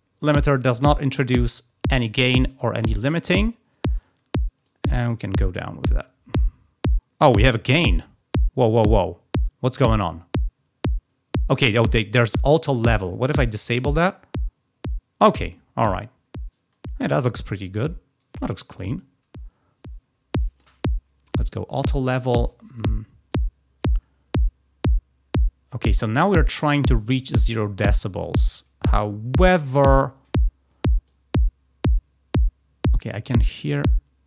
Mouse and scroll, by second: 4.5-10.1 drag, 12.9 click, 13.5-20.5 drag, 21.1 click, 23.2-29.3 drag, 31.0-33.8 drag.